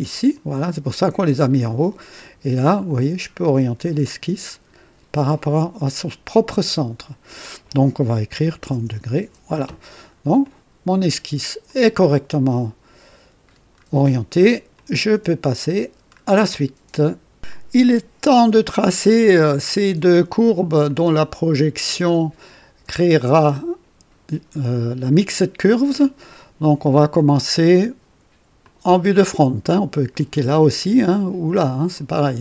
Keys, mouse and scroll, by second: 0.2 click, 2.2 scroll down 2, 8.3 KP_3, 8.5 KP_0, 8.7 KP_Enter, 9.8-10.1 scroll down 2, 10.0 typing, 10.3-11.5 drag, 11.6-13.0 drag, 13.4 scroll down 1, 13.9 right click, 14.7 click, 15.8-16.5 scroll down 2, 17.8 scroll up 2, 18.5 right click, 19.2 click, 20.9 click, 26.3-27.7 drag, 28.6 click, 31.9 click.